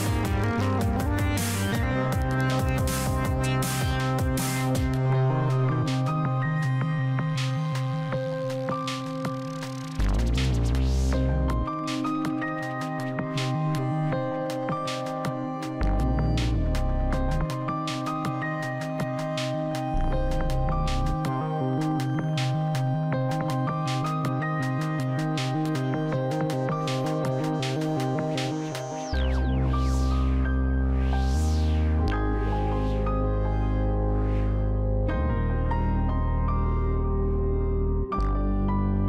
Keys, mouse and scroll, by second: 8.4 scroll up 1, 8.9-9.5 scroll down 1, 9.5 middle click, 10.5-11.4 scroll up 1, 11.4 click, 28.8 scroll down 1, 29.8 click, 36.3 scroll down 1, 36.9-39.0 middle drag.